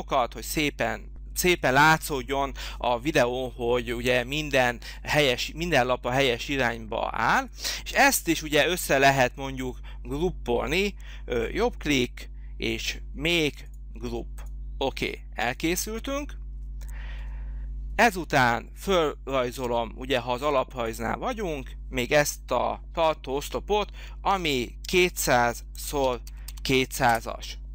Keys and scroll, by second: 24.3 2, 24.5 u, 25.8-26.7 typing, 27.0 Return.